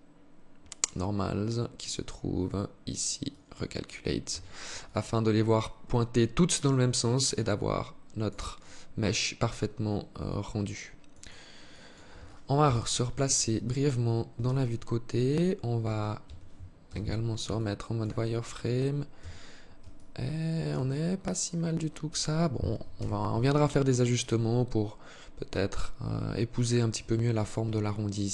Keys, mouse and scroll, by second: 0.1-0.7 scroll down 5, 0.7 scroll up 1, 1.0-2.1 scroll down 1, 2.6 click, 3.6 Tab, 4.1 alt+click, 7.9 alt+click, 10.5 alt+click, 11.0 alt+click, 11.9 KP_3, 13.7 Tab, 15.1 Tab, 15.5 Tab, 16.1 z, 16.8 alt+shift+click, 17.5-17.9 scroll up 3, 18.5 a, 19.2 alt+shift+click, 22.2 z, 27.1 alt+shift+click.